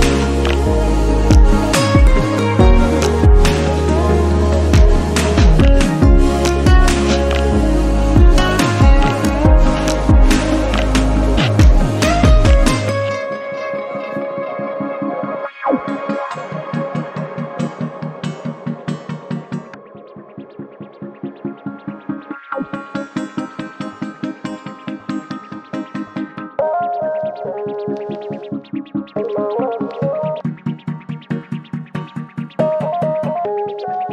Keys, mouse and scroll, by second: 0.8 click, 1.4 shift+middle click, 2.0 click, 2.6 x, 3.2 click, 3.6 click, 4.7 click, 4.9 shift+middle click, 5.1-5.5 scroll up 2, 5.5 click, 6.6 x, 7.1 click, 7.4 click, 8.1 shift+middle click, 8.6 click, 10.3-10.9 scroll down 10, 11.1-11.6 scroll up 7, 11.6 x, 12.5 click, 13.1 shift+middle click, 13.5 click, 14.1 click, 14.7 click, 15.1 scroll down 1, 15.4 shift+middle click, 16.2-16.9 scroll up 2, 16.9-17.6 scroll up 3, 16.9 shift+middle click, 17.6 click, 18.4 click, 19.6 click, 19.8 shift+middle click, 20.4 click, 21.0 click, 21.7-23.1 shift+middle drag, 23.1 click, 23.6 click, 24.5 click, 24.6 scroll down 3, 24.9 shift+middle click, 25.3-25.7 scroll up 4, 25.7 click, 26.4 x, 26.9 click, 27.1 scroll down 3, 27.3 shift+middle click, 27.9 click, 28.9 x, 29.6 scroll up 2, 29.9 shift+middle click, 30.6 click, 31.6 click, 32.2 shift+middle click, 33.1 click, 33.7 x.